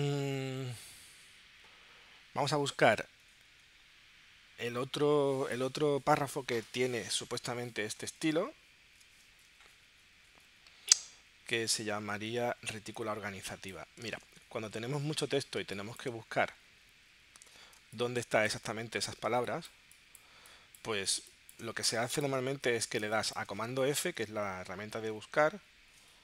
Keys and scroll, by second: 14.3 super+Tab, 15.6 space, 17.8 space, 23.0 space.